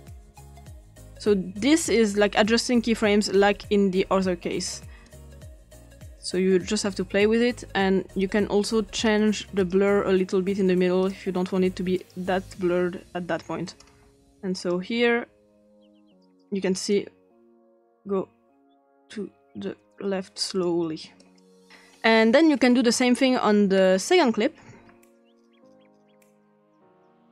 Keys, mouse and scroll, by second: 5.0-6.2 drag, 8.2 click, 9.0 click, 9.6 click, 11.0 click, 12.0 click, 13.7 click, 14.6 click, 16.2 click, 16.9-20.6 drag, 21.2 click, 21.8-22.2 ctrl+scroll down 1, 22.6-23.5 scroll down 1, 23.8-24.7 scroll up 1, 24.7 x, 25.9 click, 26.4-26.7 typing.